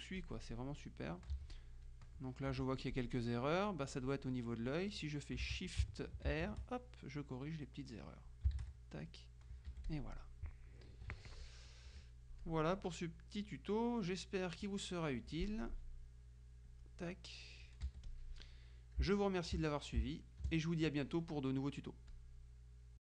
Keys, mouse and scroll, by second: 0.3 click, 1.4 z, 1.6 click, 2.8 F2, 2.8 click, 4.2 click, 6.4 r, 8.4 shift+click, 9.0 shift+r, 9.8 F1, 10.0 click, 11.0 KP_Subtract, 12.0 F2, 12.5 click, 13.2-14.8 drag, 15.2 F1, 16.8 click, 17.9 F1, 18.2 click, 19.2 space, 21.2 click, 22.2 click.